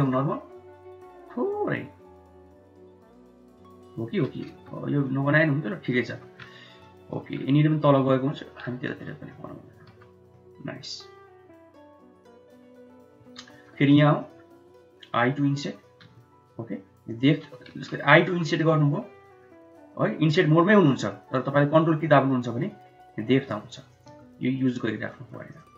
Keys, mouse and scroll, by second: 4.3 Tab, 4.9-5.7 middle drag, 5.9 Tab, 6.7 middle click, 8.2 middle drag, 8.7 Tab, 9.2 middle click, 9.7 Tab, 10.2-12.8 middle drag, 13.0 Tab, 13.3 middle click, 13.7 3, 14.0 click, 14.9 i, 17.6 ctrl+z, 18.2 i, 25.0 middle click, 25.3 click.